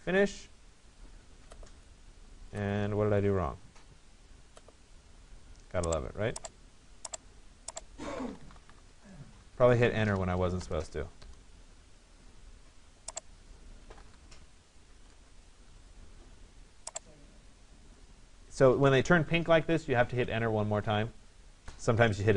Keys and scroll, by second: 14.0 6, 15.2 Return, 21.6 Return.